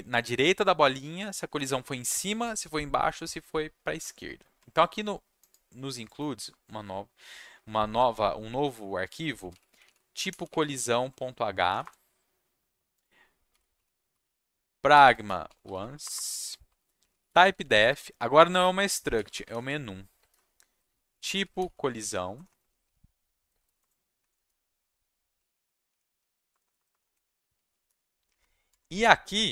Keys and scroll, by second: 9.1-11.7 typing, 11.8 Return, 13.2-28.4 typing, 23.8 Return, 24.2 Down, 28.7 Tab.